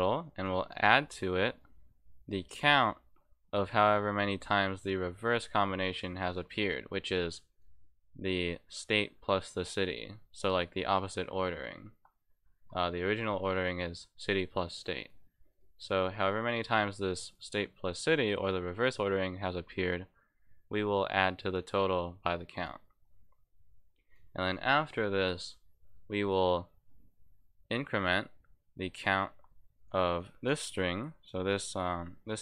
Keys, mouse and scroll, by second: 1.3 click, 1.6-2.8 drag, 7.5 click, 8.7-9.7 drag, 15.0 click, 15.5 click, 16.3-17.3 drag, 21.6 click, 22.6 click, 23.0-24.1 drag, 29.8 click, 30.2-31.3 drag.